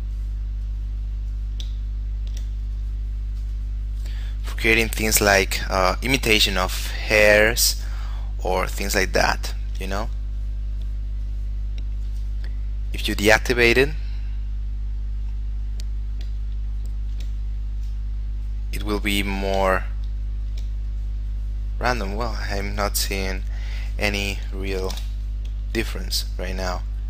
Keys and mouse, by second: 2.1 shift+middle click, 2.9 click, 6.4 shift+middle click, 7.2 click, 9.7 shift+middle click, 10.1 click, 17.0 shift+middle click, 17.6 click, 20.1 shift+middle click, 21.0 click, 23.6 click, 24.9 0, 25.1 Return, 25.9 click.